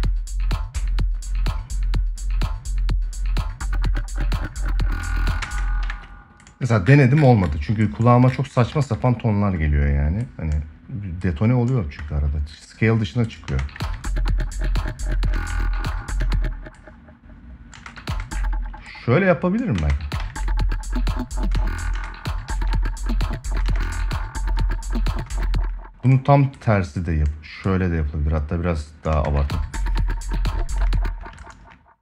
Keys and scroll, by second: 5.2 space, 5.6 ctrl+s, 8.4 ctrl+s, 13.2 space, 13.6 ctrl+s, 15.1 space, 17.1 space, 17.5 space, 19.5 space, 19.9 ctrl+s, 21.3 space, 22.2 ctrl+s, 23.4 space, 25.0 space, 28.8 space, 30.5 space.